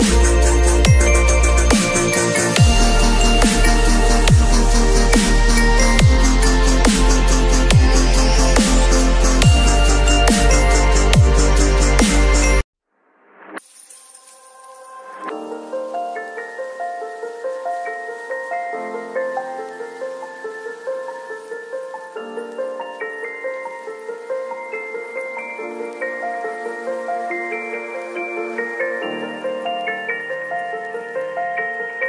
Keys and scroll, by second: 1.6 ], 7.4 v, 13.3 ctrl+u, 17.3 ctrl+l, 24.5 Return, 25.4 space, 31.6 space, 31.9 ctrl+a.